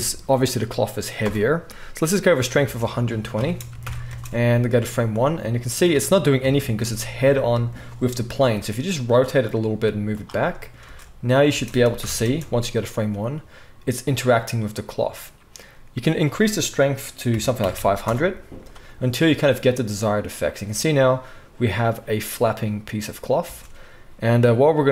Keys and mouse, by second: 2.6 space, 3.4 space, 3.8 shift+Left, 4.0 space, 6.4 KP_7, 6.7 space, 7.1-9.5 drag, 7.1-11.5 right drag, 8.4 r, 9.7 g, 10.8 space, 11.5 click, 11.5 space, 11.8 shift+right click, 12.0 shift+Left, 12.2-14.5 drag, 12.2 space, 14.5 right click, 16.0-24.9 middle drag, 17.7 0, 23.5 space.